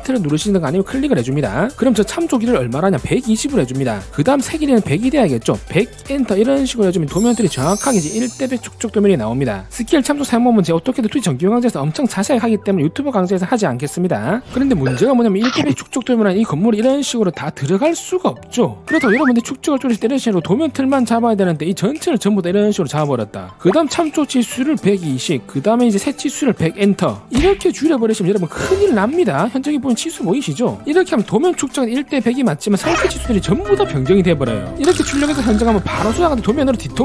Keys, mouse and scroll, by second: 6.3 1, 15.2 click, 16.4 click, 16.7 right click, 17.0 click, 17.5 click, 20.5 click, 21.0 click, 21.4 click, 21.7 click, 22.4-25.5 typing, 22.9 right click, 23.1 click, 23.5 click, 26.7 1, 29.5 middle click, 29.9 middle click.